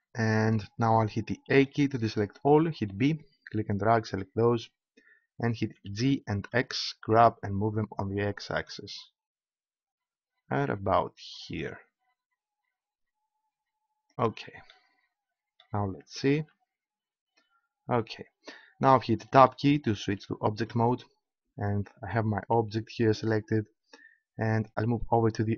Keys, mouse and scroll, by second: 1.5 a, 2.8 b, 5.7 g, 14.2-16.2 drag, 16.3 Tab.